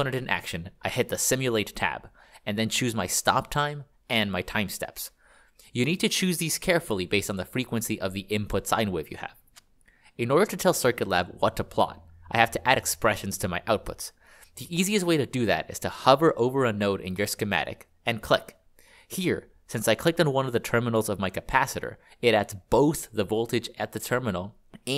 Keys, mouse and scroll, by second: 18.4 click.